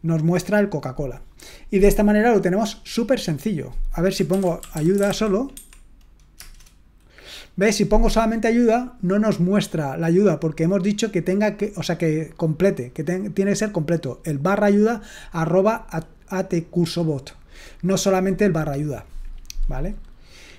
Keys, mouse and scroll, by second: 4.5-5.6 typing, 6.4 Return.